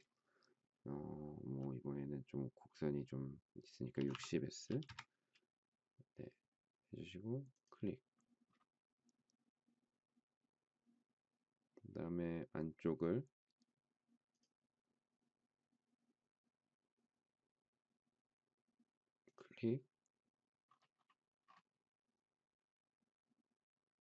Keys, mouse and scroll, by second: 3.7-5.1 typing.